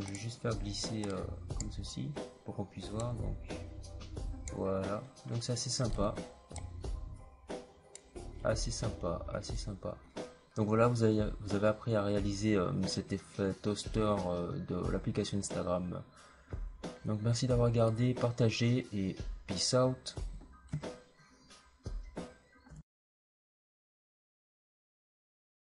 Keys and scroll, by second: 22.6 Return.